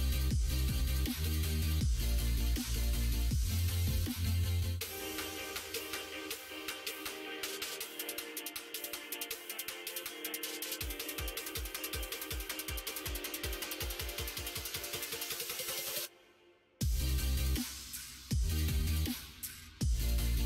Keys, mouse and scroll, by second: 0.8 alt+click, 1.6 2, 2.0 alt+click, 5.0 middle click, 7.0 g, 9.6 click, 10.2 shift+click, 11.0 g, 13.3 Tab, 13.7 click, 14.2 middle click, 15.7 middle click, 16.9 middle click, 17.8 middle click, 18.5-20.0 middle drag, 20.1 Tab.